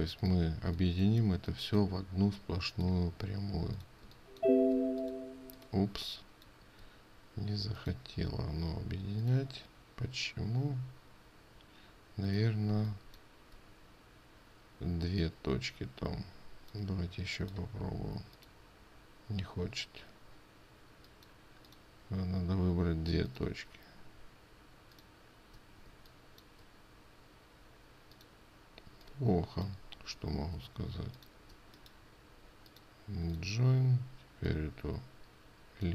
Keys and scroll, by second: 6.5 ctrl+space, 13.2 ctrl+space, 26.4 ctrl+space.